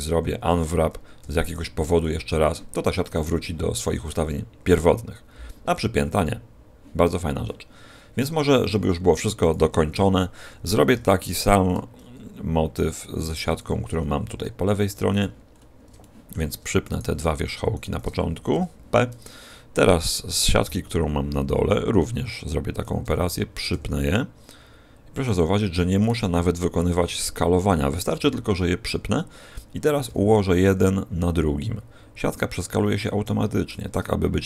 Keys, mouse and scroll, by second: 1.1 u, 8.6 a, 9.9 l, 10.9 r, 13.5 click, 13.8 g, 15.1 click, 15.4-15.8 scroll up 3, 15.9 shift+middle click, 16.8 right click, 17.7 shift+right click, 18.5 p, 20.5 l, 21.6 r, 22.7 click, 22.9 g, 23.1 click, 23.6 g, 25.3 click, 25.9 right click, 26.8 p, 27.9 right click, 28.0 p, 30.0 g, 33.7 shift+click.